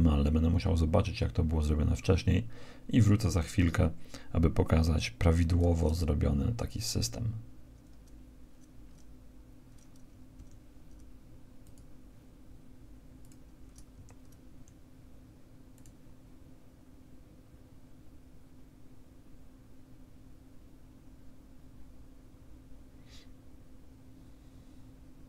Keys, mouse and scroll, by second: 8.8 middle click, 9.4 click, 12.4 click, 13.0 Escape, 13.2 alt+a, 17.0 Escape, 17.2-18.4 right drag, 18.2 s, 18.9 middle click, 19.1 right click, 19.6 middle click, 20.5 middle click, 20.6 right click, 20.7 ctrl+a, 21.3 ctrl+a, 21.3-22.4 right drag, 21.8 ctrl+a, 22.1 ctrl+a, 22.8 KP_1, 23.3 alt+a, 23.8 right click.